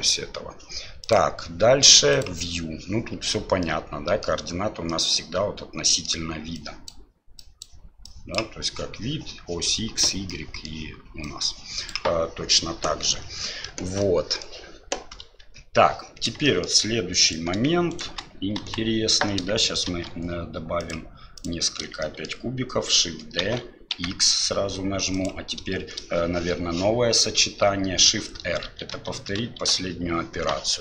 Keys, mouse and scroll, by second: 1.2-2.9 drag, 3.6-4.2 middle drag, 4.9-6.1 middle drag, 6.5 click, 7.5 click, 8.1 click, 10.4 middle drag, 11.2 click, 14.1-14.4 middle drag, 15.4 KP_7, 16.4 shift+middle drag, 17.3 right click, 17.9 shift+right click, 18.6 Delete, 19.9 shift+a, 22.0 shift+drag, 23.4 shift+d, 28.7 shift+r, 28.9 shift+r, 29.7 shift+r.